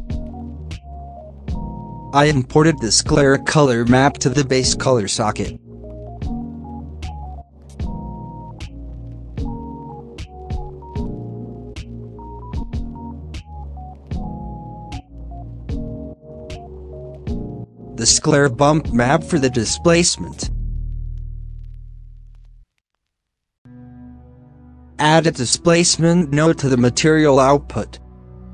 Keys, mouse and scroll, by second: 2.3-3.9 drag, 3.9 middle click, 3.9 scroll up 6, 4.3 scroll down 1, 4.4 middle click, 5.4 scroll down 1, 5.4 middle click, 6.2 scroll up 1, 7.1 click, 7.3 scroll down 3, 7.5 shift+middle drag, 7.6 scroll up 1, 7.8 z, 9.6-12.5 drag, 12.5 shift+middle drag, 12.7 scroll up 1, 13.0 shift+middle drag, 13.1 shift+scroll down 1, 13.7 scroll down 4, 13.9 middle click, 14.1 scroll up 1, 14.5 click, 15.1 alt+a, 15.4 click, 16.0 scroll up 1, 16.3 middle click, 16.6 shift+d, 17.3 click, 19.1-19.5 middle drag, 19.5-19.9 drag, 19.9 shift+a, 23.2 scroll down 4, 23.4 middle click, 23.7 g, 24.3 middle click, 24.5 scroll up 5, 24.9-27.9 drag, 27.9 b.